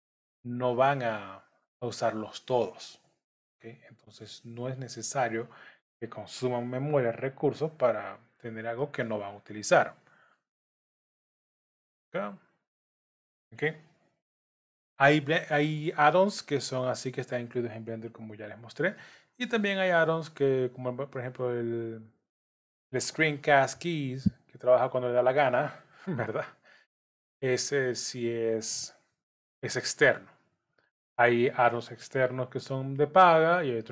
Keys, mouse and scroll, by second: 0.7 shift+click, 1.9 click, 3.0 j, 3.9 click, 5.4 shift+click, 7.4 j, 8.8 middle click, 12.0 click, 13.0 shift+click, 14.5 j, 16.2 click, 17.0 shift+click, 18.4 j, 18.9 middle click, 20.3 click, 22.1 shift+click, 23.2 j, 23.9 click, 25.0 shift+click, 25.8 j, 26.4 middle click, 27.4 click, 28.1 shift+click, 29.1 j, 30.2 click, 31.5 shift+click, 32.5 j, 33.2 scroll down 1.